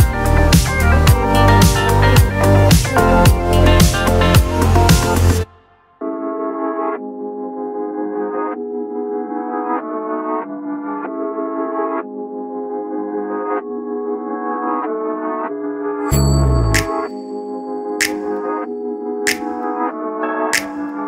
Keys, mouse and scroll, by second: 0.7 click, 3.3 click, 4.0 click, 4.7 click, 5.4 click, 5.6 click, 6.5 click, 7.1-9.0 drag, 9.6 click, 11.3 click, 11.7 click, 12.0 click, 12.9 click, 13.3 click, 13.6 click, 14.2 click, 14.7 click, 15.1 click, 15.3 click, 16.1 click, 17.9 click, 18.3 click, 19.3-21.0 scroll down 1.